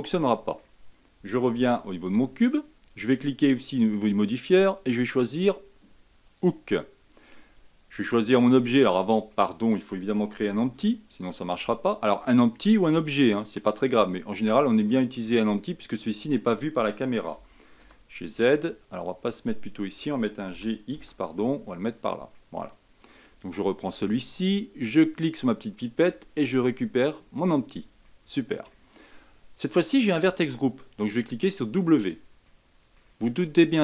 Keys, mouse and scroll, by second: 1.4 Tab, 3.7-7.8 drag, 8.8-9.2 scroll down 2, 9.2-10.5 middle drag, 10.5 shift+a, 17.3 g, 20.4 g, 22.3-22.9 middle drag, 22.9 click, 25.2-28.0 drag, 28.0-29.8 middle drag, 29.8-32.4 drag, 32.4-33.8 middle drag.